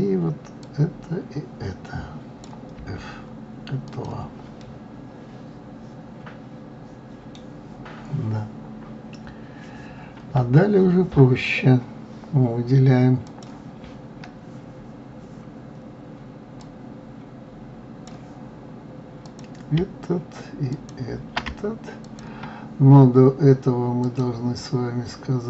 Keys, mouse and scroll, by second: 1.0-3.2 drag, 3.2 f, 4.3 click, 5.0-8.0 middle drag, 13.7 click, 17.0-21.3 drag, 22.5-24.6 shift+drag.